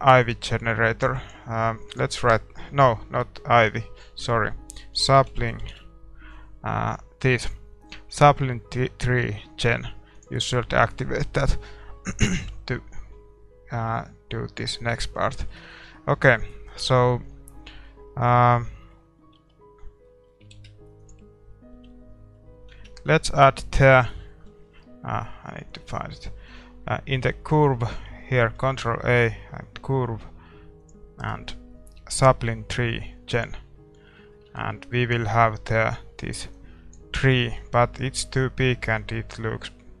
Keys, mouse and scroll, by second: 15.0-18.9 middle drag, 19.4 Tab, 20.3-33.5 middle drag, 21.1 shift+s, 21.8 Tab, 33.9-36.6 middle drag, 36.6-40.0 drag, 37.1-40.0 middle drag.